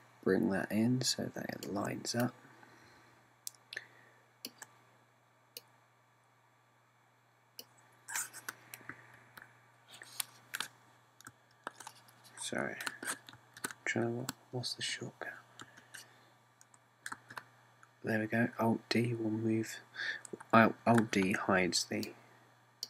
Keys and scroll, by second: 9.9 d, 12.3 d, 14.4 d, 16.6 d, 18.2 alt+d, 22.0 alt+d.